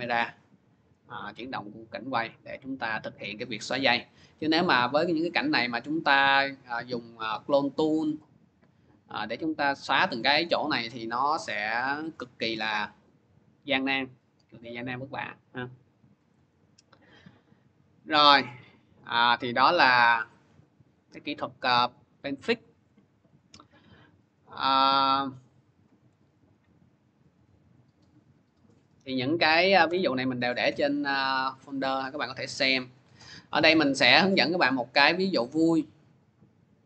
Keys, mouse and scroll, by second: 0.6 click, 2.1 click, 2.4 middle click, 5.7 click, 8.4 click, 9.0 middle click, 9.8 middle click, 10.9 scroll, 14.0 middle click, 16.1-19.9 drag, 19.9-23.2 middle drag, 19.9 scroll, 23.2 click, 25.3 click, 26.3 click, 28.1 click, 29.2 Delete, 29.7 Return, 30.9 click, 31.2 click, 32.6 click, 35.9 click.